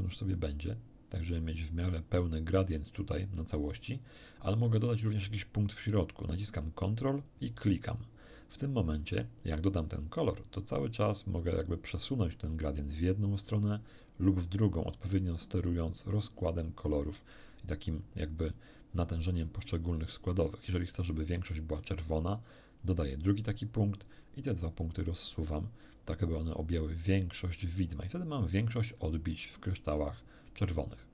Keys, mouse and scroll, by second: 7.5 ctrl+click, 10.1-18.4 drag, 22.8 ctrl+click, 23.9-25.8 ctrl+drag, 26.3-27.9 drag, 28.5 scroll down 1, 29.0 middle click, 29.7 middle click, 30.5 middle click.